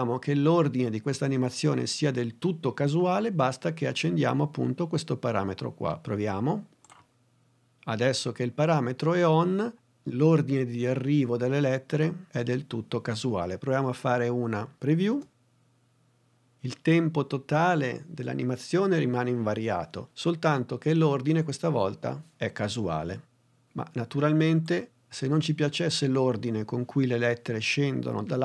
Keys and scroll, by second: 15.0 space.